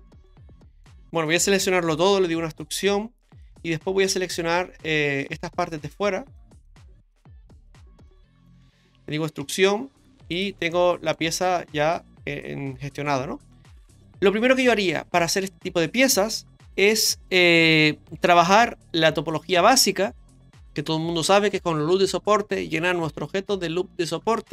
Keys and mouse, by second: 0.3 middle click, 1.6 a, 2.1 e, 5.2 right click, 5.7 shift+right click, 6.6 shift+right click, 7.1 shift+right click, 7.7 ctrl+shift+right click, 9.4 e, 10.7 middle click, 13.1-14.8 middle drag, 15.2 shift+middle click.